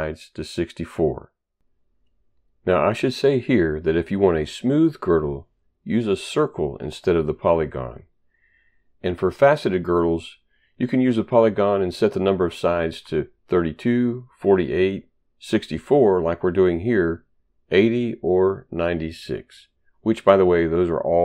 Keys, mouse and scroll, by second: 0.1-1.1 typing.